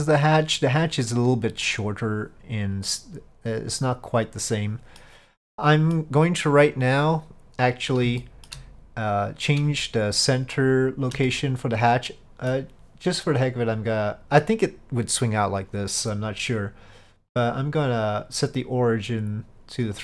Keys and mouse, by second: 1.7-5.1 middle drag, 5.6-6.0 middle drag, 8.3 shift+middle drag, 11.3-12.6 middle drag, 17.5-20.0 drag.